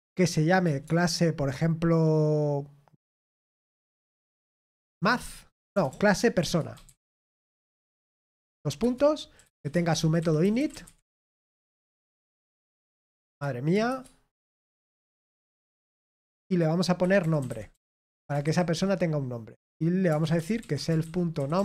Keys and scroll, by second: 7.3-16.1 typing, 8.8 Return, 17.5-19.6 typing, 21.3-21.6 typing.